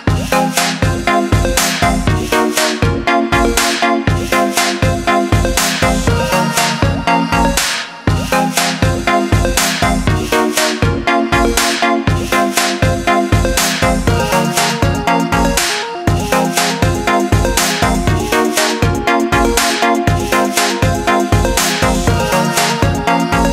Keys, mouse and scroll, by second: 7.1 KP_1, 8.7-9.2 scroll up 2, 9.2-10.2 scroll down 4, 10.2-11.2 scroll up 1, 11.2-14.4 shift+middle drag, 14.8 g.